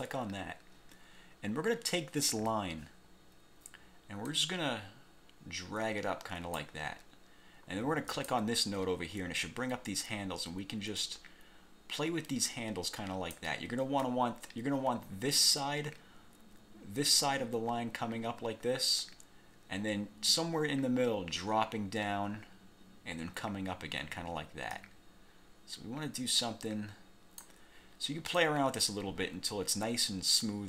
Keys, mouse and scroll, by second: 0.0 click, 4.5-6.9 drag, 8.3 click, 11.1-13.7 drag, 14.2-15.7 drag, 24.9-27.7 drag, 28.5-30.6 drag.